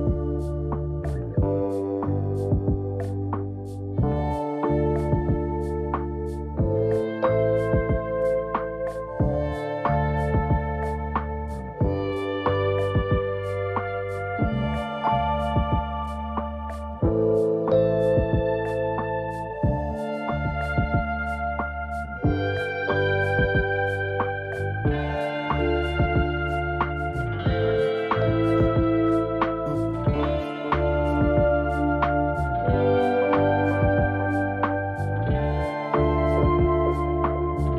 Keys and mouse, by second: 0.4 w, 0.6 w, 1.2 w, 2.3 click, 3.6 ctrl+middle click, 5.9 shift+click, 6.7 g, 16.5 ctrl+r, 30.6 ctrl+r, 37.4 ctrl+r.